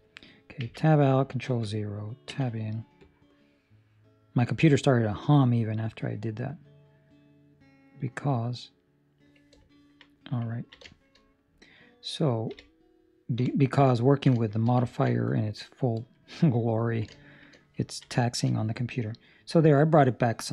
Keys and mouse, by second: 1.0 ctrl+Tab, 2.2 Tab, 2.2 ctrl+0, 2.9 click, 9.6 ctrl+middle click, 10.0 middle click, 10.5 ctrl+middle click, 11.0 shift+middle click, 11.2 middle click, 12.4 KP_3, 13.3 KP_5, 14.0 ctrl+middle click, 14.3 shift+middle click, 14.8 ctrl+middle click, 17.0 ctrl+middle click, 17.1 shift+middle click, 17.4 shift+middle click, 17.8 ctrl+middle click, 18.1 shift+middle click.